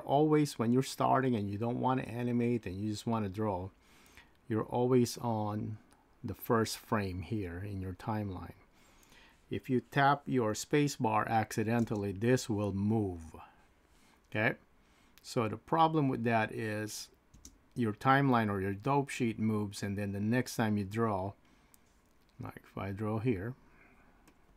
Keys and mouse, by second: 11.8 space, 17.4 space, 24.3 click.